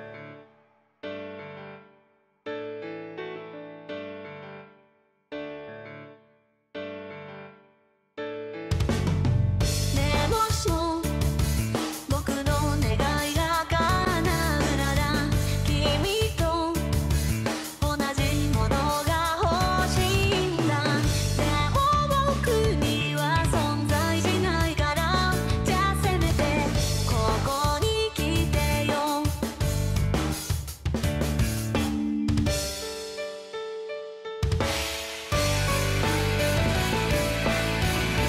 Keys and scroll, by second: 0.3 ctrl+z, 8.6 ctrl+z, 9.2 ctrl+z, 9.6 ctrl+z, 9.8 ctrl+z, 9.9 ctrl+z, 11.3 ctrl+z, 11.7 ctrl+z, 15.0 ctrl+z, 15.5 ctrl+z, 15.8 ctrl+z, 16.0 ctrl+z, 16.2 ctrl+z, 16.4 ctrl+z, 18.2 ctrl+z, 18.3 ctrl+z, 18.4 ctrl+z, 21.8 ctrl+z, 33.9 ctrl+z, 34.0 ctrl+z.